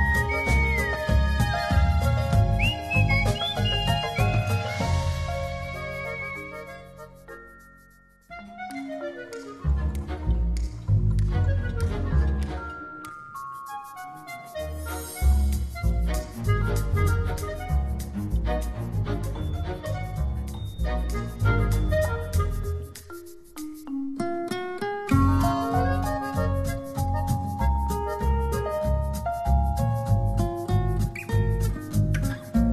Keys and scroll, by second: 2.1 alt+BackSpace, 2.9 alt+super+BackSpace, 3.1 alt+super+d, 8.3 super+t, 26.2 Return.